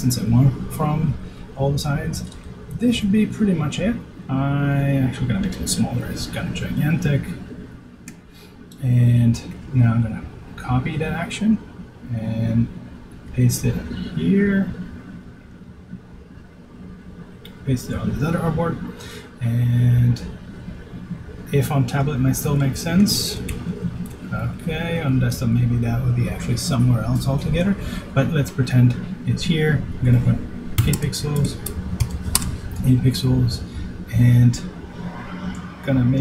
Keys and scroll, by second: 5.1 super+s, 15.5 super+v, 25.1 shift+Left.